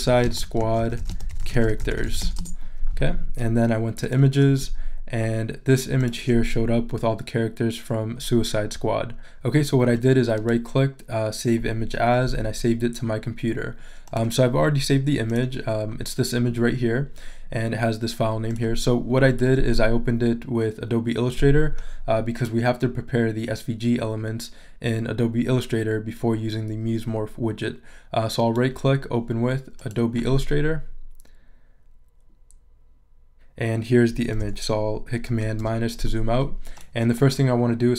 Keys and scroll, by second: 0.0-1.8 typing, 2.4 Return, 35.3 super+-.